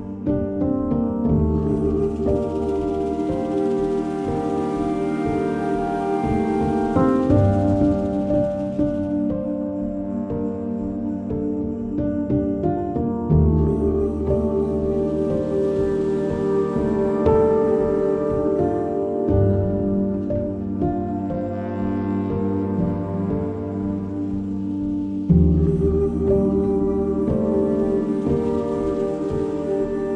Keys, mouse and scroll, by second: 6.9 click, 7.4 click, 12.1 middle click, 12.2 click, 13.7 scroll down 1, 14.5 scroll down 1, 15.6 click, 20.2 click, 20.2 click, 28.5 shift+Return, 29.9 Down.